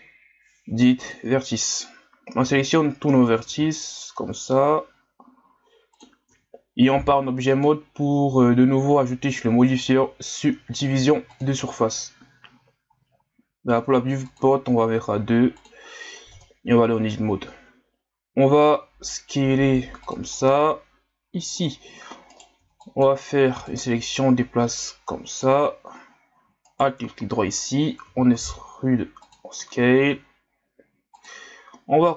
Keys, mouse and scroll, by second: 0.1 Delete, 2.4 a, 3.5 s, 6.3 Tab, 7.5-16.0 drag, 16.0-16.4 scroll up 1, 16.4 Tab, 18.6 s, 20.6-22.3 drag, 22.3 right click, 22.6 b, 23.6-26.6 drag, 26.6 alt+right click, 28.0 e.